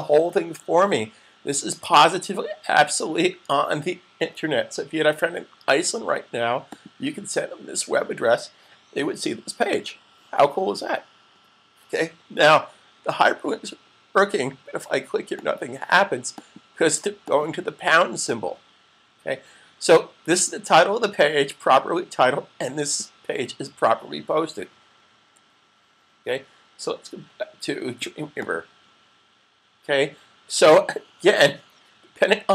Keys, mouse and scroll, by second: 6.6 click, 15.1 click, 25.0 super+Tab, 28.3 click.